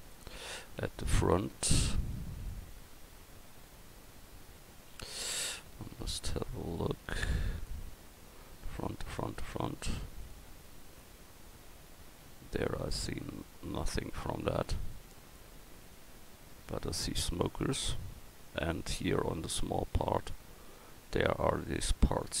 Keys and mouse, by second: 0.7-2.7 middle drag, 6.0 KP_1, 10.3 middle click, 21.6 middle drag.